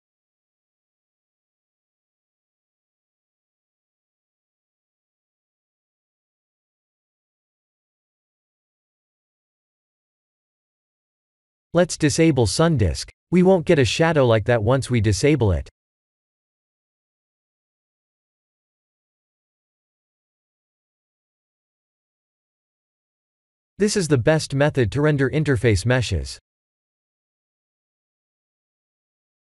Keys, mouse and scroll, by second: 2.4-2.9 scroll up 2, 3.8-4.1 scroll up 1, 6.9 click, 7.9 click, 15.6 click, 22.3 click, 24.8 click, 26.7 click, 28.8 click.